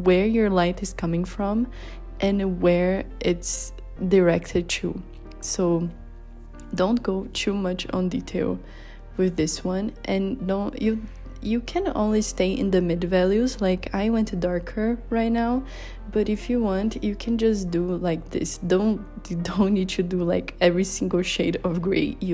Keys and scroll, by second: 4.4 z, 5.3 b, 6.3 z, 7.1 b, 9.0-10.6 typing, 11.6 z, 12.4 z.